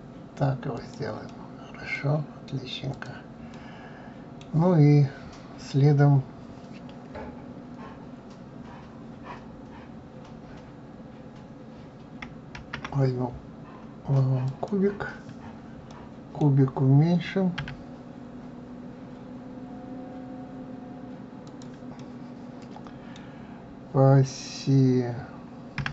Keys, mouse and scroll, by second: 1.3 middle click, 2.2-2.9 scroll down 2, 2.9 click, 3.5-6.5 middle drag, 12.6 shift+a, 15.9-17.6 middle drag, 17.6 s, 22.0-25.0 middle drag.